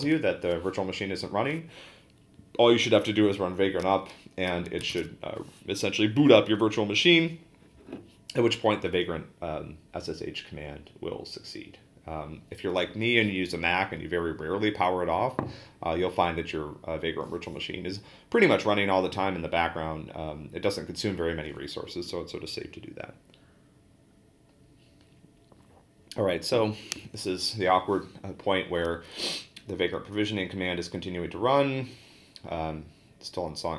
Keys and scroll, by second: 4.9 a.